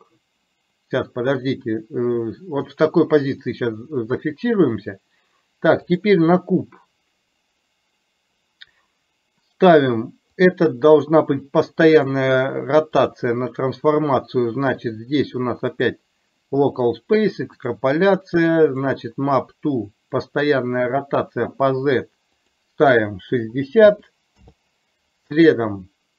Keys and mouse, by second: 6.0 click, 10.5-11.0 drag, 12.0-13.3 drag, 15.8-16.9 drag, 17.7 click, 18.7 click, 20.3 click, 22.5-24.4 drag.